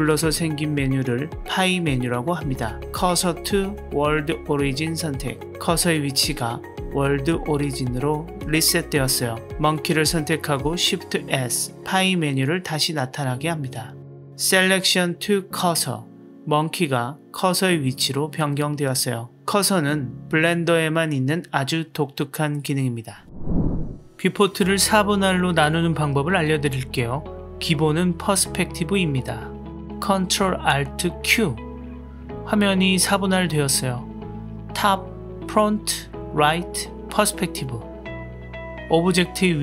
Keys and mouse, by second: 7.9 click, 11.4 shift+s, 17.2-20.0 middle drag, 31.1 ctrl+alt+q, 38.5-39.6 drag.